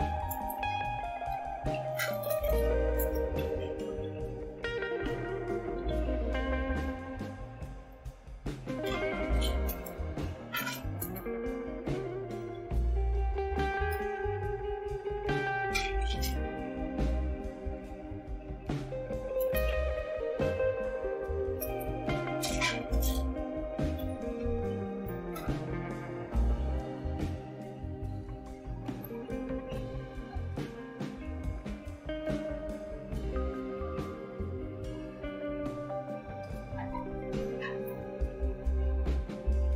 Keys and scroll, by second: 0.1-7.3 typing, 7.8 Return, 9.1-13.8 typing, 18.6-32.8 typing, 34.1-37.2 typing, 37.8 Return.